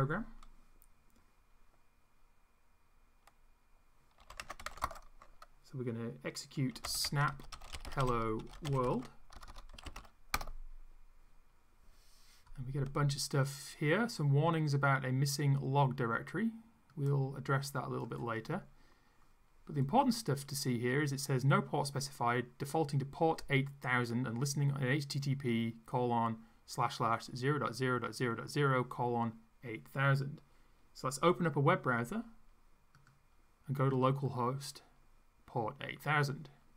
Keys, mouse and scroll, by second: 0.0-0.2 typing, 4.0-5.2 typing, 6.5-10.5 typing, 17.0-18.4 drag, 33.0 click.